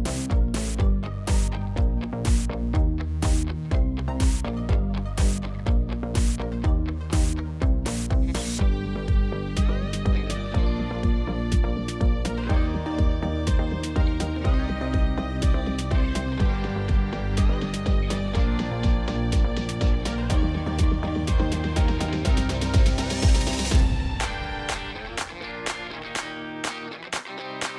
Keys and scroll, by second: 1.1 Tab, 1.6 alt+a, 6.2 ctrl+a, 8.2 shift+a, 9.3 e, 9.5 m, 16.0 2, 16.2 Return, 19.7 2, 19.9 Return, 24.6 g, 26.1 shift+a, 26.9 e, 27.2 m.